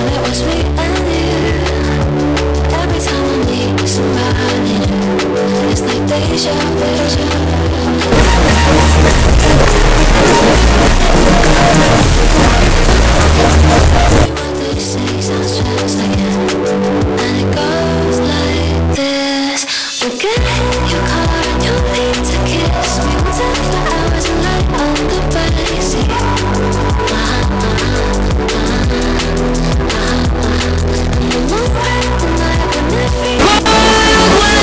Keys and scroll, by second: 14.7 Page_Down.